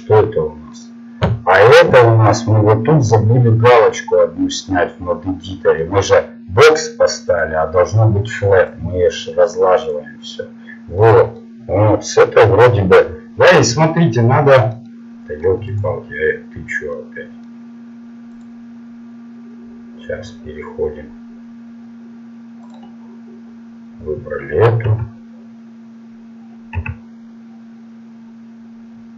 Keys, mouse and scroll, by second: 11.0-12.3 middle drag, 12.9-15.5 middle drag, 15.7-18.1 right drag, 24.9 s.